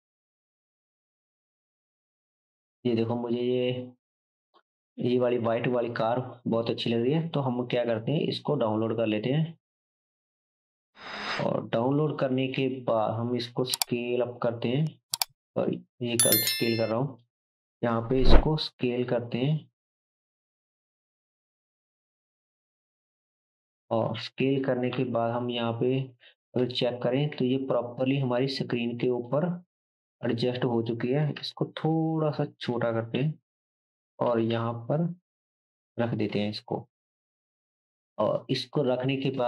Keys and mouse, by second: 12.0-16.7 drag, 13.7 s, 16.7-17.2 middle drag, 17.2 click, 18.2 s, 24.9 KP_3, 27.3 shift+z, 31.4 s, 33.1 KP_7, 34.2-38.6 middle drag, 34.2 g, 38.5 click, 38.6-39.4 right drag.